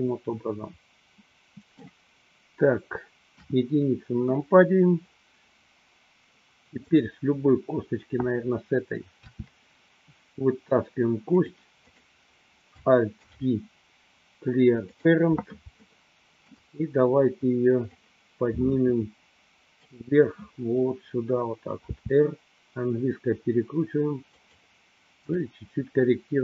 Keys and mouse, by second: 3.4 KP_1, 6.9 click, 9.3 e, 12.1 click, 13.4 alt+p, 15.8-16.9 shift+middle drag, 18.0-20.0 drag, 22.0 r, 24.5 click, 25.5-26.4 drag.